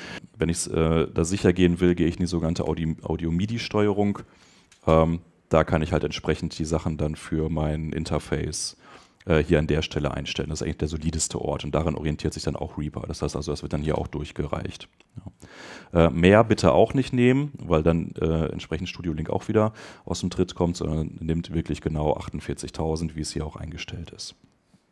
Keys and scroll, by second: 2.6 Return.